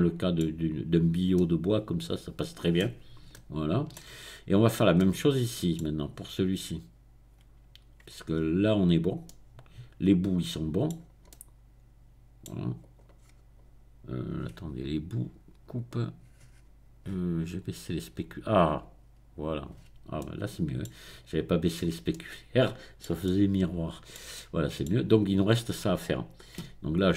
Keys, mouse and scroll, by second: 0.8-1.3 scroll down 1, 1.3-3.1 middle drag, 3.3 shift+middle click, 4.3-4.9 scroll up 2, 6.1-7.1 scroll down 2, 8.3-9.2 scroll up 2, 10.9-11.3 scroll down 2, 12.8 click, 13.2-13.9 scroll up 2, 15.7 click, 16.1-17.3 middle drag, 17.3-18.1 scroll down 1, 18.1 middle click, 18.8-19.9 drag, 19.9-24.1 middle drag, 26.9 Tab.